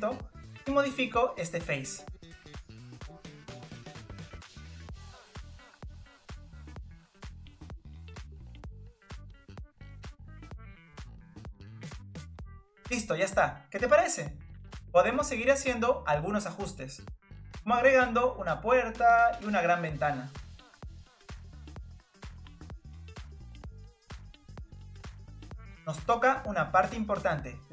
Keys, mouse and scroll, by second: 0.1 click, 1.8 click, 4.5 click, 4.8 click, 5.0 scroll down 2, 5.1 middle click, 5.3 scroll up 1, 5.5 click, 5.9 middle click, 6.2 click, 6.7 click, 7.2 click, 7.3 middle click, 7.7 click, 7.8-8.3 scroll down 1, 8.3 click, 8.5 click, 8.7 click, 9.0 click, 9.3 click, 9.5 click, 9.6 middle click, 10.5 click, 10.6-11.0 scroll up 1, 11.1 click, 11.6 click, 12.1 click, 12.8 click, 12.9 middle click, 13.1 scroll down 1, 13.2 middle click, 14.4-14.7 scroll up 1, 14.7-16.7 middle drag, 16.7-18.4 scroll up 2, 18.5 scroll down 2, 18.5 middle click, 18.6 scroll up 3, 18.7 scroll down 1, 18.8 middle click, 19.2 click, 19.2 middle click, 19.3 ctrl+z, 19.3 ctrl+z, 19.4 click, 19.4 middle click, 19.6 middle click, 19.7 scroll up 1, 19.7 middle click, 20.1 click, 20.2 click, 20.3 middle click, 20.4 scroll down 2, 20.5 middle click, 20.7 click, 20.8 middle click, 20.9 click, 21.0 scroll up 2, 21.1 click, 21.2 scroll down 3, 21.6 click, 21.7 click, 22.1 click, 22.2 scroll up 4, 22.3 click, 22.5-23.0 scroll down 5, 22.6 click, 22.8 middle click, 22.9 middle click, 23.0 middle click, 23.2 scroll up 1, 23.3-23.7 shift+middle drag, 23.7-24.3 scroll up 2, 24.3-25.8 scroll down 2, 27.0 click, 27.3 Tab.